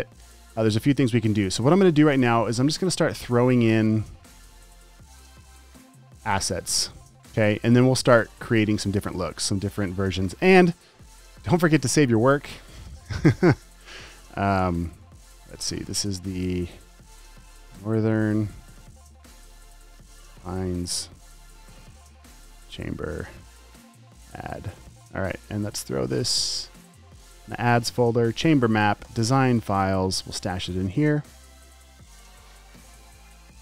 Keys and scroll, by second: 3.6 super+t, 5.8 v, 6.3 shift+Down, 6.7 shift+Right, 7.3 shift+Down, 7.5 shift+Right, 7.9 shift+Up, 8.1 shift+Down, 8.4 shift+Right, 11.6 super+s, 15.0 Left, 15.3 Delete, 17.0-25.0 typing.